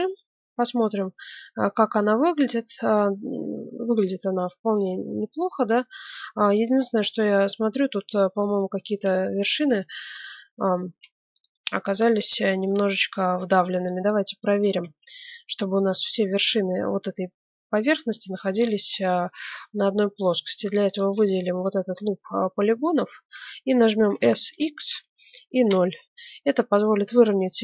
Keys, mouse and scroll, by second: 6.7-9.1 middle drag, 8.8 ctrl+Tab, 9.4 ctrl+Tab, 9.9 Tab, 10.8 ctrl+Tab, 11.7 middle click, 13.9 middle click, 14.8 ctrl+Tab, 16.4-17.9 right drag, 19.0-20.7 middle drag, 20.7-22.8 right drag, 22.8 middle click, 24.1 s, 27.1-27.6 middle drag.